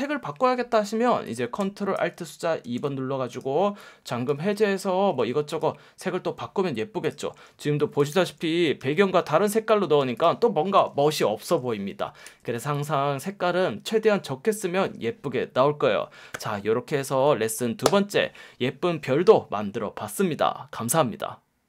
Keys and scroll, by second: 2.6 alt+super+2, 5.0 super+z, 7.5 space, 8.0 super+space, 8.8 F1, 10.0 F1, 12.2 super+z.